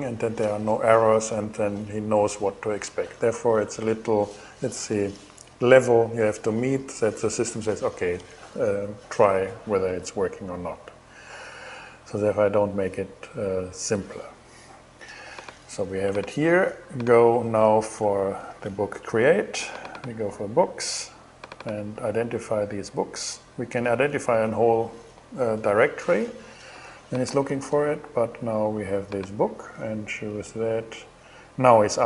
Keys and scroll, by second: 17.6 shift+Return.